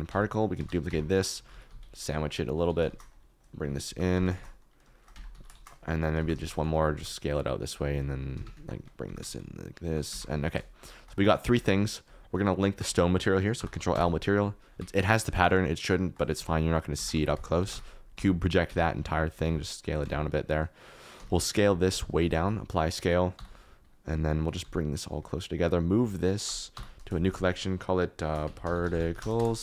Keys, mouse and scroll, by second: 0.1 Tab, 0.5-6.9 typing, 0.8 Tab, 3.4 click, 4.9 shift+click, 5.2 Tab, 7.9 r, 8.3 Escape, 8.5 Tab, 9.0 g, 9.2 shift+z, 10.1 Tab, 13.5 ctrl+l, 15.9 shift+click, 16.3 ctrl+a, 16.9 Tab, 17.1 a, 17.6 u, 18.2 Tab, 18.6 Tab, 18.9 a, 19.3 a, 19.4 s, 19.8 click, 20.2 Tab, 21.1 s, 21.6 click, 21.8 s, 22.1 ctrl+a, 23.2 click, 24.6 g, 25.3 shift+click, 26.7 m, 29.4 Return.